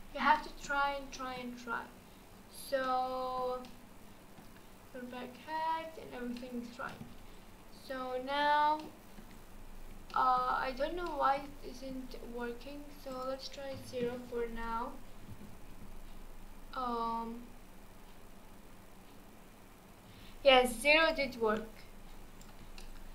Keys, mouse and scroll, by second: 0.3-2.5 middle drag, 2.5-2.8 scroll down 1, 2.8-9.4 middle drag, 9.4-10.1 scroll down 4, 10.1 shift+middle click, 10.5-11.1 scroll up 4, 11.1-11.5 shift+middle drag, 11.5 scroll up 1, 13.1-14.5 drag, 14.5-15.3 scroll down 2, 15.3 space, 20.2 space, 21.0-21.5 drag, 21.5-21.9 scroll up 2, 22.2 shift+click, 22.8-23.1 middle drag.